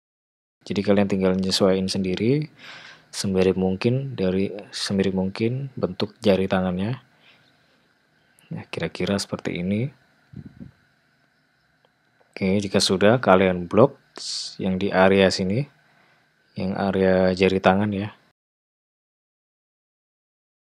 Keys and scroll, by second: 0.4 g, 3.2 g, 6.7 g, 11.3 g, 11.9 g, 12.2 g.